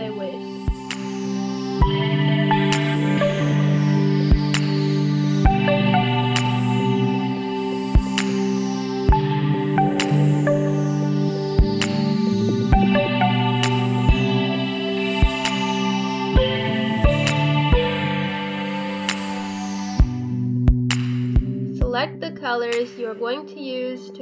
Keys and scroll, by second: 7.7 Delete, 11.1 ctrl+z, 12.2 4, 12.7 4, 16.8 b, 17.0 BackSpace, 17.2 Caps_Lock, 18.1-19.0 typing, 20.5 ctrl+d, 21.8-23.4 typing.